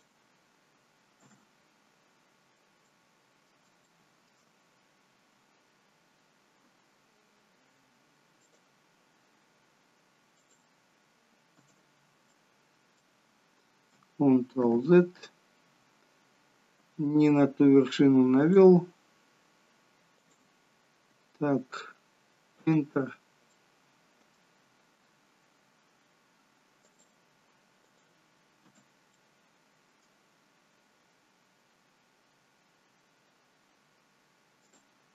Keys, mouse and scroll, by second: 2.2-2.8 scroll down 2, 2.8 middle click, 2.8 scroll down 1, 3.8 shift+middle click, 4.4-4.9 scroll up 4, 6.6 k, 12.3 middle click, 14.6 ctrl+z, 16.7 k, 23.5 middle click, 24.9 k, 29.1 middle click, 33.6 k.